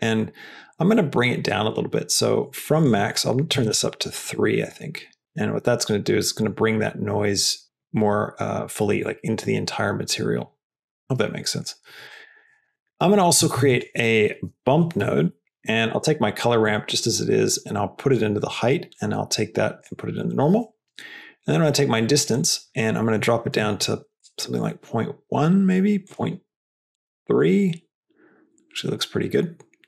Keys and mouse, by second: 2.7-4.3 drag, 5.2-6.4 drag, 7.6 drag, 8.5-9.0 drag, 10.8-11.6 drag, 12.1 middle drag, 12.6 click, 12.9 click, 14.1 shift+a, 15.8 click, 16.6-18.1 drag, 18.8-19.9 drag, 22.2-25.3 drag, 26.0-27.9 drag.